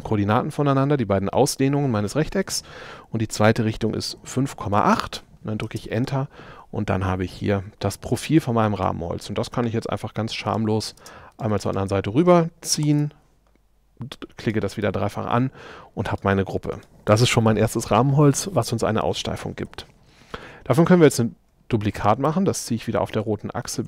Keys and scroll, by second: 3.5 5, 4.8 Return, 5.7 space, 8.1 p, 11.0 space, 19.7 m.